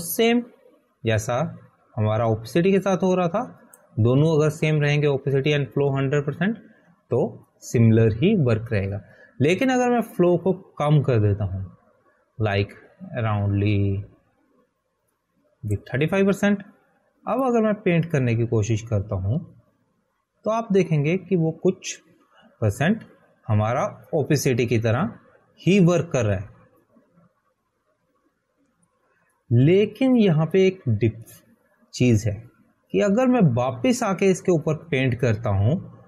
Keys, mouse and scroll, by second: 13.3 click.